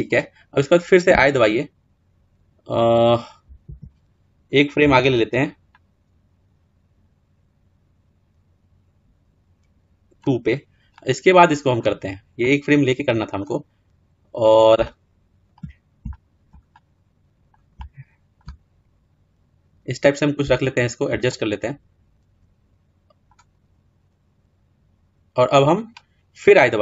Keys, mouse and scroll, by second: 0.9 i, 5.7 click, 10.8-11.8 middle drag, 11.8-12.2 scroll up 5, 12.2-13.4 middle drag, 13.4-14.6 scroll down 3, 14.6-18.4 shift+middle drag, 18.4 scroll down 1, 20.3-23.3 shift+middle drag, 23.3-23.7 scroll up 1, 23.8-25.6 scroll down 2, 25.6-26.4 scroll down 1, 26.4 scroll down 1.